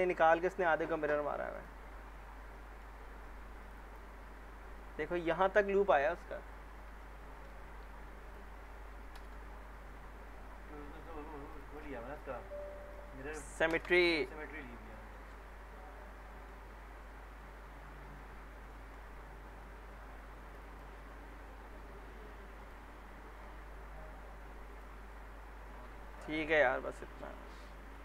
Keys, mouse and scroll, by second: 1.6 click, 2.1-2.6 scroll up 1, 2.6 middle click, 3.6 click, 5.0-5.9 alt+middle drag, 7.0-7.6 alt+middle click, 8.2 click, 9.1 ctrl+BackSpace, 11.5 click, 13.7 ctrl+BackSpace, 14.5 scroll down 2, 14.9 alt+middle click, 15.3-16.1 scroll up 2, 16.2 alt+middle click, 16.6-17.7 alt+scroll up 3, 17.9 alt+middle click, 18.2 alt+scroll down 1, 18.7 alt+middle click, 19.2-20.5 scroll up 1, 20.5 click, 25.1-26.4 alt+middle click, 26.2 scroll down 1, 26.5-27.3 alt+middle click, 27.5 middle click.